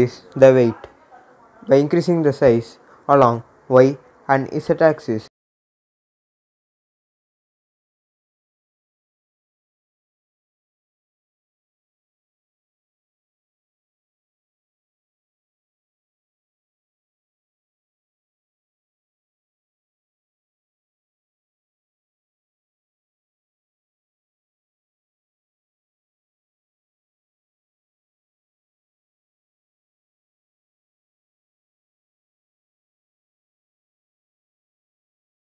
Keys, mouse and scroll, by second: 5.7-9.3 drag, 9.3 s, 10.2-15.4 drag, 15.4 scroll up 1, 16.6 s, 17.4 click, 17.7 scroll down 1, 19.0-21.9 drag, 21.9 scroll up 1, 23.3-25.7 drag, 28.1 click, 28.5-29.7 scroll down 1, 29.7 click, 31.9 click.